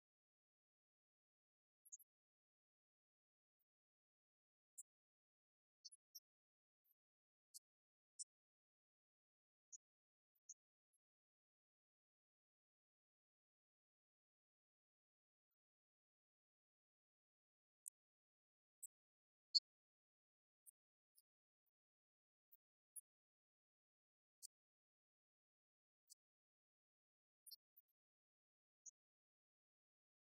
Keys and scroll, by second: 1.4 Right, 2.1 Left, 5.2 alt+Down, 7.7 Down, 11.4 Down, 11.8 Up, 14.6 Escape, 15.6 Right, 15.9 Left, 16.8 alt+Down, 19.7 Down, 21.0 Escape, 22.0 Right, 22.3 Left, 22.6 Right, 23.3 Left, 24.4 alt+Down, 25.3 Escape, 26.2 Right.